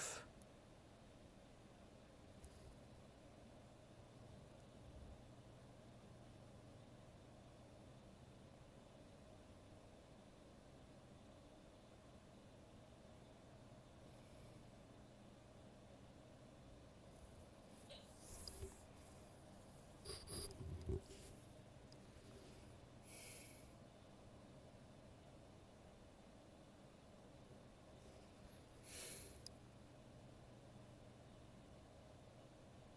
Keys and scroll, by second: 0.8 ctrl+z, 11.1 ctrl+z, 16.5 ctrl+z, 26.8 ctrl+z, 30.5 ctrl+z.